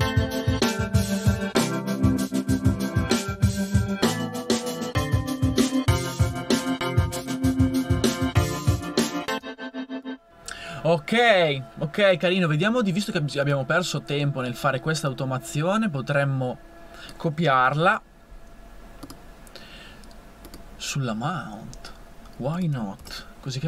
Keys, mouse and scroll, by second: 5.4 a, 9.3-10.4 drag, 11.3 click, 17.9 super+c, 23.0 super+v.